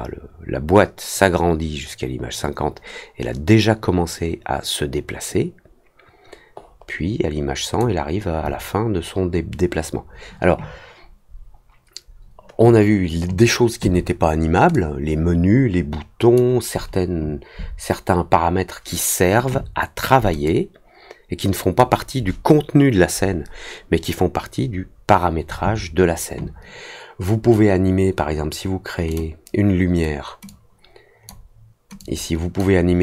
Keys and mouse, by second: 14.7-16.3 drag, 20.4-21.7 drag, 29.0 click, 30.4 click, 31.9 click.